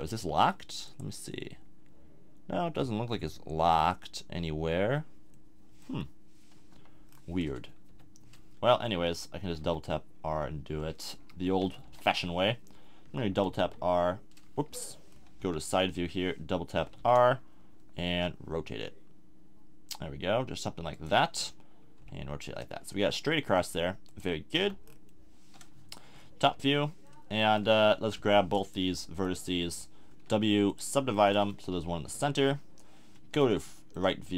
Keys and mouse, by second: 6.7 KP_7, 7.9 r, 9.4 r, 11.7 middle click, 11.8 KP_1, 13.4 r, 15.4 KP_3, 16.8 r, 22.0 r, 24.6 z, 24.8-25.2 drag, 26.4 KP_7, 27.9 Tab, 30.2 w, 31.7 KP_1, 32.2 KP_3, 32.3 middle click.